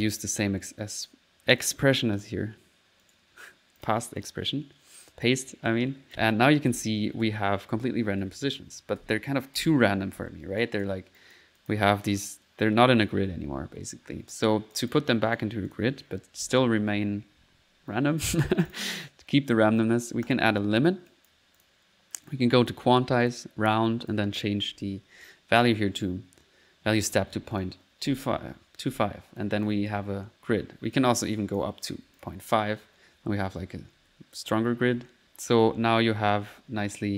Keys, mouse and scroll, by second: 0.0 click, 0.5 right click, 0.8 right click, 1.6 click, 2.2 click, 3.0 right click, 3.8 click, 4.2 click, 5.5 click, 5.9-10.2 typing, 10.6-11.9 drag, 12.9 click, 13.0-13.7 typing, 14.8 click, 15.3 right click, 15.6-16.9 typing, 15.7 click, 16.1 click, 18.7 click, 20.3 click, 21.1 click, 21.6 click, 22.3 click, 22.7 click, 23.3 click, 23.5-24.2 typing, 23.8 click, 27.6 click, 27.9-28.9 typing, 29.4 click, 30.0-30.6 typing, 30.0 click, 31.0-32.2 drag, 32.5-37.1 typing, 35.2 click.